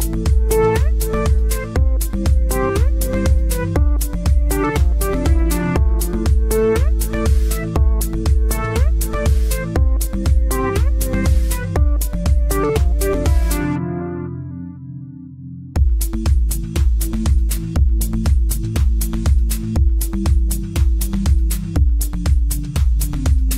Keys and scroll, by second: 4.6 Delete, 7.5 Delete.